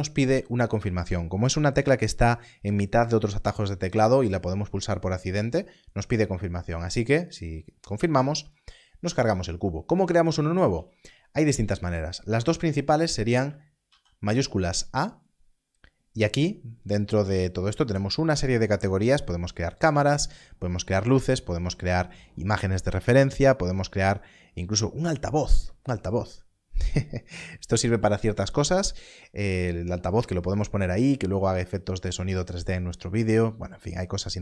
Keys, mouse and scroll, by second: 7.2 click, 13.4 click, 13.8 shift+a.